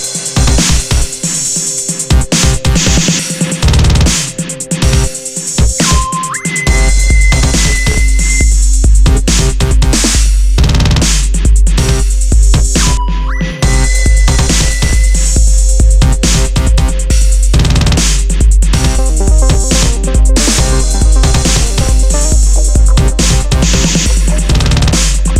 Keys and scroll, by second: 0.4 super+-, 0.9 super+-, 2.2 super+-, 9.3 super+z, 11.8 super+z, 12.2 super+z, 13.5 alt+shift+super+e, 14.3 super+t, 15.7 Return, 16.9 shift+Down, 17.2 Return, 22.7 super+d.